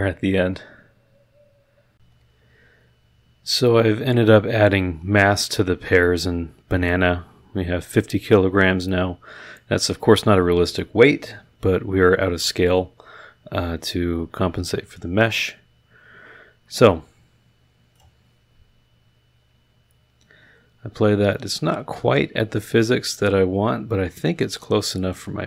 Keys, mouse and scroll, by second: 1.9 click, 17.9 click.